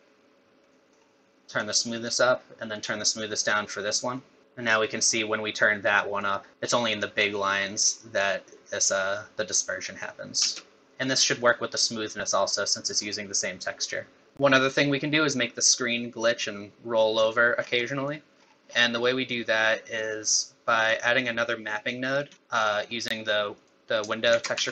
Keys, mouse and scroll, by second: 0.7 middle click, 1.6 click, 2.7 click, 4.2 middle click, 4.4 click, 10.4 space, 10.8 middle click, 10.8 scroll down 5, 11.2 middle click, 12.5 click, 14.3 middle click, 14.3 scroll down 8, 17.6 scroll down 4, 17.8 middle click, 18.4-18.8 scroll down 8, 19.0 middle click, 20.8 middle click, 21.7 middle click, 22.3-23.5 scroll up 5, 22.4 middle click, 23.5 click, 24.3 shift+a.